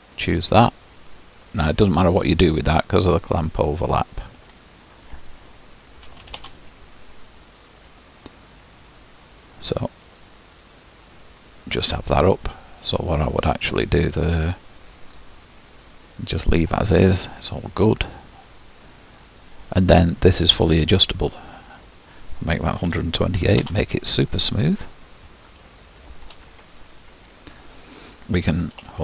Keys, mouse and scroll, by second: 2.7-6.5 drag, 8.1-11.0 drag, 16.9-23.7 middle drag, 23.7-24.9 drag, 24.9-29.0 middle drag.